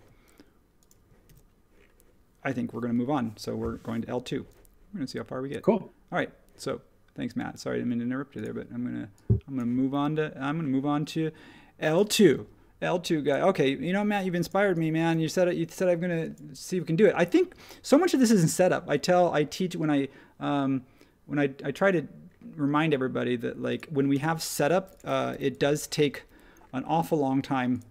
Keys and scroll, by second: 1.2 super+1, 25.3 h, 25.9 space.